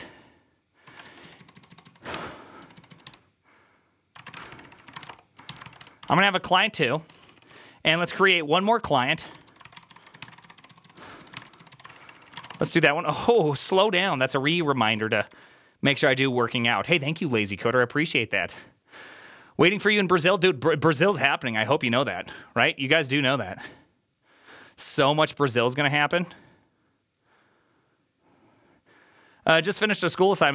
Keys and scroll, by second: 0.7-7.3 typing, 8.8-15.6 typing, 13.2 ctrl+d.